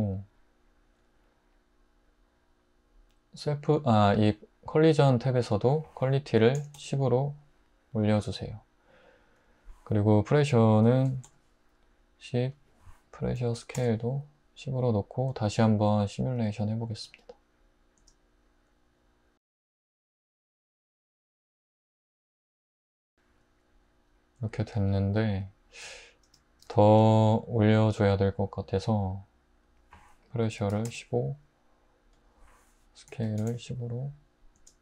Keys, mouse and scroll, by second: 6.4-6.8 typing, 10.9-11.2 typing, 13.4-13.8 typing, 18.0 space, 22.9 space, 25.9-26.5 drag, 30.6-30.9 typing, 33.1 typing, 34.7 space.